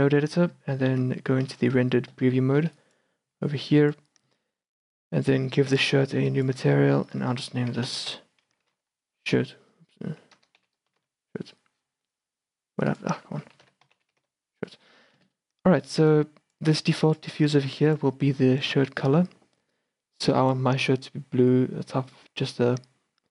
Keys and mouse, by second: 1.0 Tab, 1.6 z, 2.7 shift+b, 3.3 b, 6.3-11.1 drag, 13.0-15.2 drag, 15.5-16.2 middle drag, 16.2-17.0 drag, 17.0-17.3 middle drag, 17.3-19.8 drag.